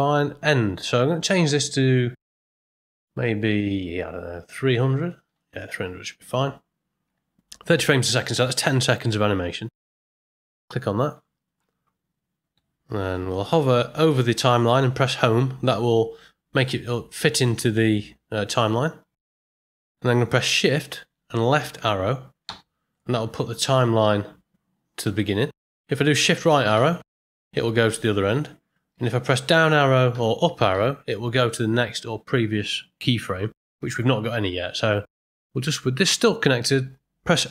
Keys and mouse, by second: 0.9-11.1 drag, 5.4 KP_0, 13.0 Home, 22.4 shift+Left, 26.7 shift+Right, 29.1 Down, 30.1 Up, 30.7 Down, 31.3 shift+Left, 35.7 middle click.